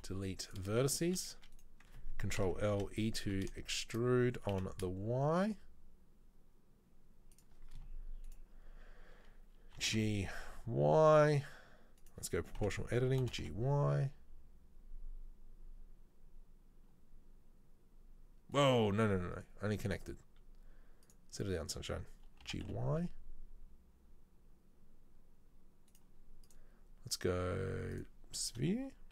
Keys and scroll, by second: 0.1 Delete, 1.1 s, 2.4 ctrl+l, 2.8 e, 9.9 g, 12.6 o, 13.4 g, 22.6 g.